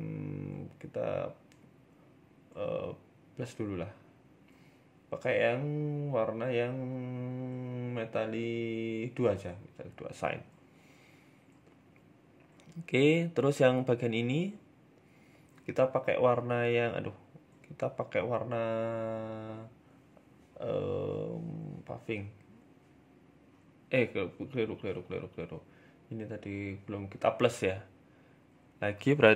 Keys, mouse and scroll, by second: 0.4 middle click, 0.9 middle click, 0.9 shift+middle click, 3.5 click, 9.1 click, 9.5 Tab, 9.6 middle click, 10.0 scroll down 2, 10.2 middle click, 10.7 scroll down 1, 10.9 shift+middle click, 10.9 shift+scroll up 1, 11.3 middle click, 11.7 right click, 12.9 right click, 12.9 middle click, 13.2 Tab, 13.3 middle click, 13.6-14.1 scroll up 1, 14.7 scroll up 1, 14.7-17.1 typing, 19.4 click, 21.8 ctrl+z, 22.7 ctrl+z, 25.2 ctrl+z, 25.2 click, 26.9 a, 27.0 a, 28.1 l, 28.9 click.